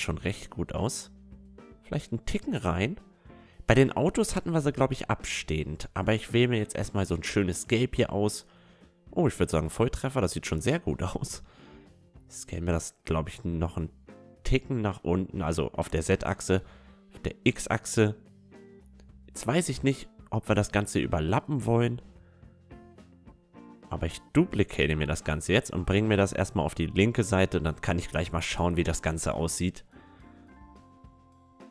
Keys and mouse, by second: 0.2-2.6 middle drag, 2.6-4.4 drag, 4.4-6.3 middle drag, 6.3-7.9 drag, 11.0-15.8 middle drag, 12.9 s, 16.3-17.9 middle drag, 16.8 s, 17.9 s, 20.0-21.6 drag, 21.4 KP_1, 23.2-24.8 drag, 24.3 shift+d, 25.0 click, 25.4-27.4 drag, 31.3 a.